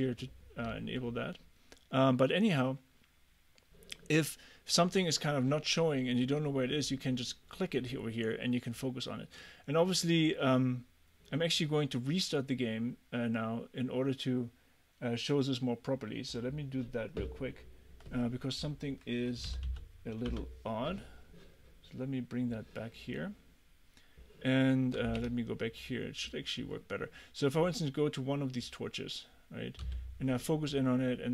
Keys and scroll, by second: 19.5 k, 20.3 Return, 25.2 Escape, 29.9 f.